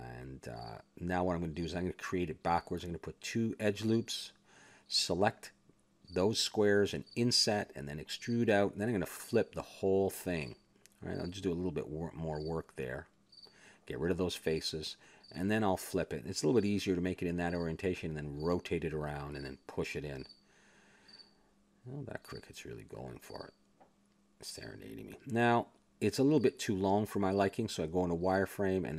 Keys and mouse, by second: 0.0 s, 0.5-2.1 drag, 1.8 s, 2.6 click, 3.3 ctrl+r, 4.4 s, 5.6 a, 5.9 ctrl+Tab, 6.5 click, 7.5 i, 8.7 click, 9.2 e, 10.6 click, 11.7 e, 12.0 s, 13.7 click, 14.3 e, 15.2 x, 16.4 Tab, 17.3 click, 18.8 r, 20.2 click, 22.1-23.6 middle drag, 23.6 click, 24.6 middle click, 25.3 KP_7, 25.6 middle click, 26.0 click, 26.4 Tab, 27.2 z, 27.8 ctrl+Tab, 28.7 b.